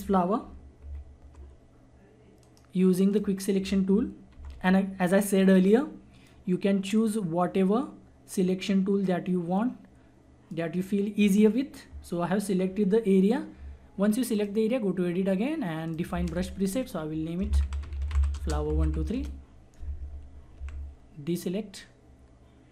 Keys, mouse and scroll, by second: 0.8 ctrl+-, 2.4 right click, 3.1 click, 4.4 [, 4.5 [, 5.7-13.1 drag, 14.3 click, 17.2-19.3 typing, 20.6 ctrl+d.